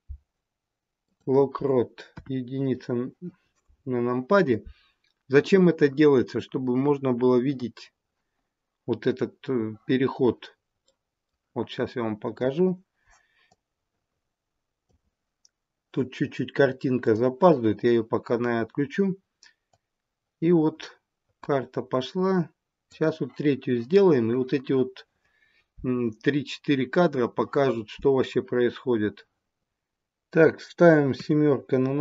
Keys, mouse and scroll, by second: 2.0 KP_1, 10.9 middle click, 12.3 KP_1, 13.4 click, 17.0 click, 19.7 click, 31.0 KP_7.